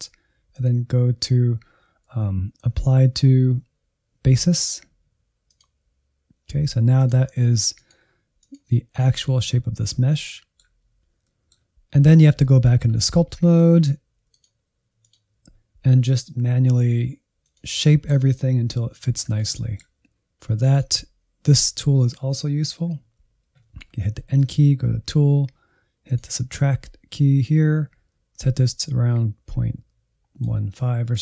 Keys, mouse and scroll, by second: 0.5-9.1 drag, 9.1-13.4 middle drag, 13.4 Insert, 14.3-16.0 drag, 16.0 f, 16.6 shift+middle click, 16.8 scroll up 1, 17.1 f, 17.5 middle click, 18.2 click, 18.5-20.1 middle drag, 20.6-22.8 drag, 22.8 n, 24.3-27.6 drag, 27.6 n, 28.8-30.7 drag, 30.7-31.2 scroll up 1.